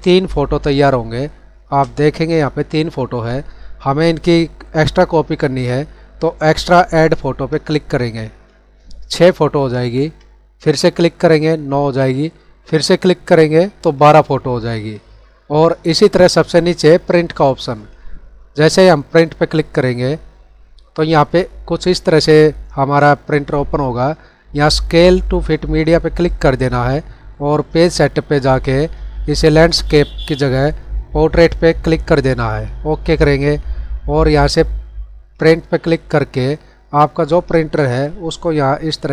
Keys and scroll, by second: 0.8 space, 9.7 ctrl+-.